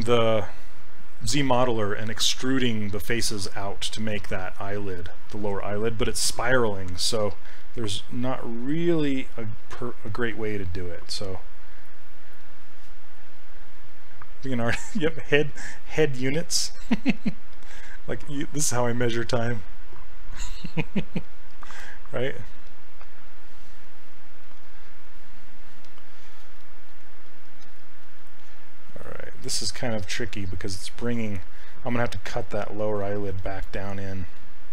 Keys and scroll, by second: 22.7 s, 29.6 s.